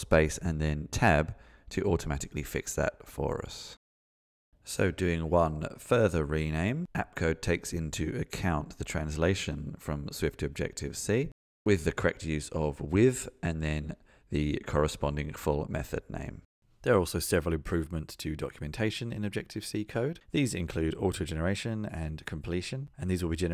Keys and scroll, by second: 15.6 shift+F6.